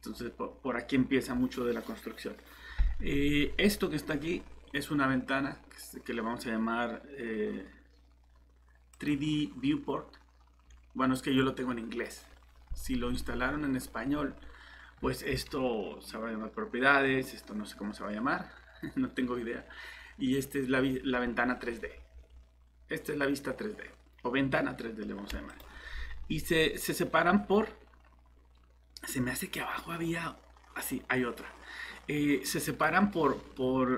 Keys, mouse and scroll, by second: 15.0 Escape.